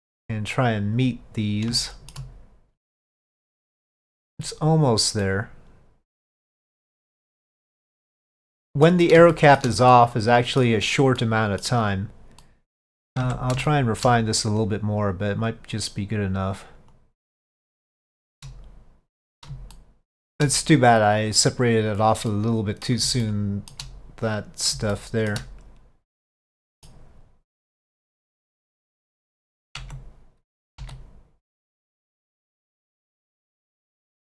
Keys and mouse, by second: 1.9 shift+middle click, 2.7-4.3 middle drag, 5.3-7.2 middle drag, 7.8-8.9 middle drag, 9.4 shift+middle drag, 10.0-10.7 middle drag, 11.3-11.7 middle drag, 12.5 middle click, 13.3 Tab, 13.8 shift+middle click, 17.1-18.3 drag, 18.3 shift+middle click, 19.8-20.4 shift+middle drag, 22.4-22.9 middle drag, 23.3-23.8 shift+middle drag, 25.0-25.4 shift+middle drag, 26.4-26.9 middle drag, 28.2-28.7 middle drag, 29.9 Tab, 30.9 s.